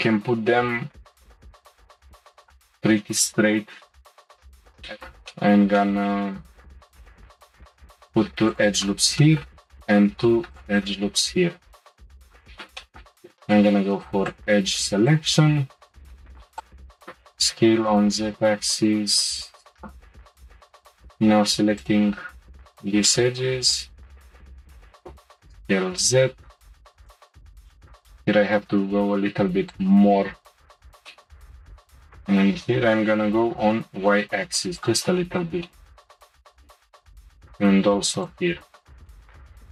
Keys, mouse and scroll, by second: 4.7 click, 4.9-7.5 middle drag, 7.5 ctrl+r, 9.2 middle click, 9.7 ctrl+r, 12.2 click, 12.5 shift+middle click, 13.3 2, 14.3 shift+click, 15.0 shift+click, 16.3 shift+click, 16.9 s, 20.5 click, 21.7 shift+click, 23.0-24.9 middle drag, 24.9 s, 27.5 g, 30.4-31.0 scroll down 1, 31.5 g, 35.2-36.5 middle drag, 36.8-37.9 shift+middle drag, 37.9 ctrl+r, 39.1 shift+middle click.